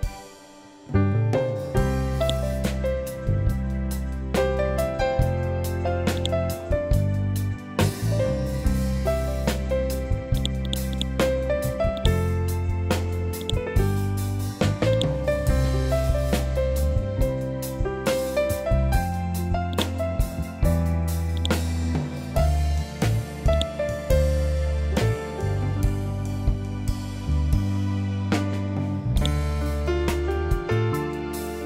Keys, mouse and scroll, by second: 0.1 Right, 2.1-3.5 drag, 3.5 Right, 4.3 Up, 5.1 Right, 6.1 click, 6.8-7.4 scroll down 1, 10.3 click, 10.3-16.5 drag, 16.5 scroll up 1, 19.6-26.7 drag, 26.7 ctrl+Home, 29.1-31.6 drag.